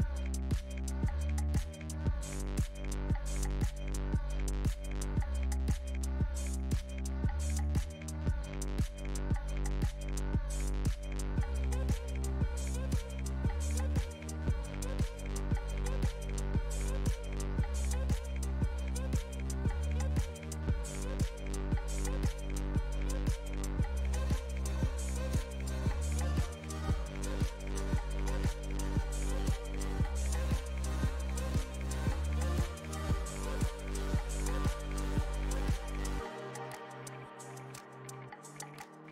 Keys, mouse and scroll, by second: 3.7 r, 8.1-9.6 shift+middle drag, 9.6 r, 10.9 r, 14.4 shift+d, 16.8 r, 24.1 click, 25.1 click, 26.9 n, 27.8 click, 29.7-38.9 shift+middle drag, 38.9 scroll up 2.